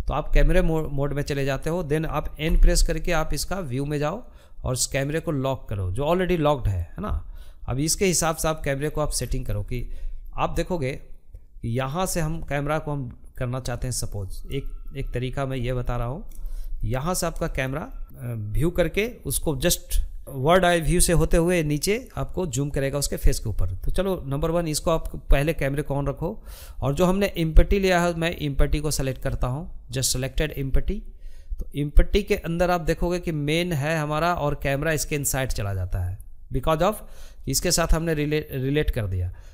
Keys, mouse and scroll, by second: 0.8 n, 2.2-5.1 drag, 5.7-7.2 shift+middle drag, 7.2-8.7 scroll down 14, 8.7-12.7 middle drag, 12.7-13.0 scroll down 1, 13.0-27.5 shift+middle drag, 27.5-30.5 drag, 31.3-39.5 drag.